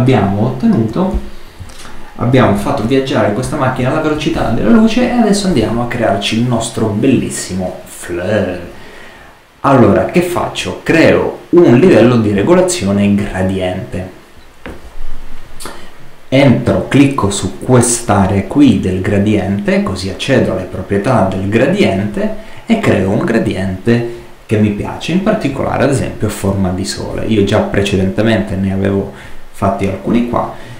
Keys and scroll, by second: 2.2 super+-.